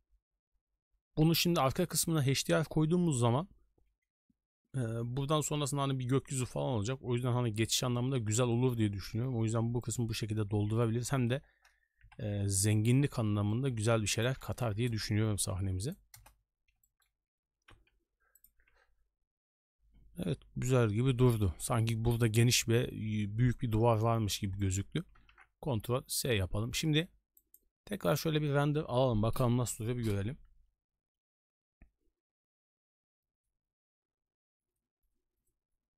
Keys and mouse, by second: 5.0-6.3 d, 8.5 shift+middle drag, 10.9 click, 12.0 KP_7, 12.9 shift+middle click, 13.5 shift+middle drag, 13.8 shift+d, 14.4 r, 15.3 g, 16.1 KP_0, 16.8 shift+middle click, 17.4 g, 18.6 a, 18.7 a, 21.2 shift+middle click, 24.6 shift+middle drag, 25.7 ctrl+s, 27.4-28.2 drag.